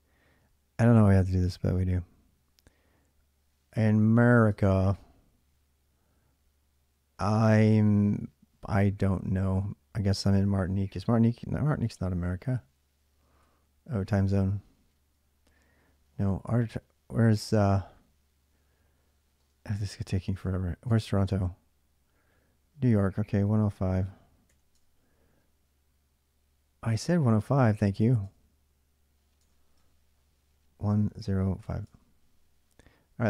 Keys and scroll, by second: 3.9 2, 4.3 Return, 11.6 9, 12.9-13.6 typing, 16.8 typing, 19.2 space, 20.7 Return, 22.9-24.3 typing, 24.5 Return, 28.0 Return, 29.6 Return, 30.6-31.4 typing, 31.6 Return.